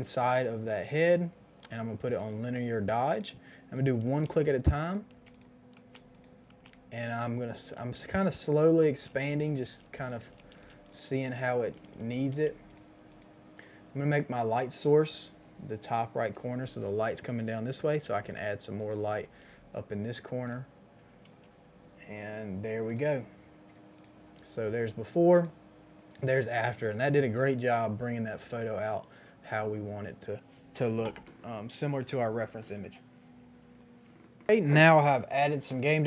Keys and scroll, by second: 4.2-7.7 typing, 8.8-10.5 typing, 11.6-12.9 typing, 18.1 ], 19.0 [, 19.2 [, 19.4 [.